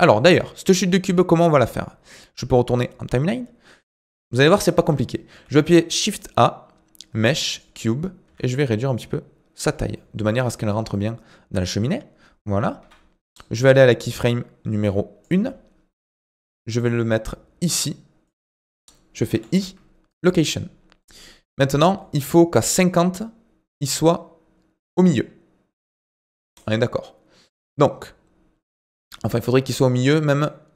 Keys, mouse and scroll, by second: 0.0-3.2 drag, 3.2-3.9 scroll down 5, 3.9-5.3 scroll up 2, 5.3 shift+a, 8.2 s, 9.9-12.0 middle drag, 12.0-12.8 scroll down 3, 12.8 KP_1, 14.2-16.2 drag, 16.2 g, 22.0-25.1 drag.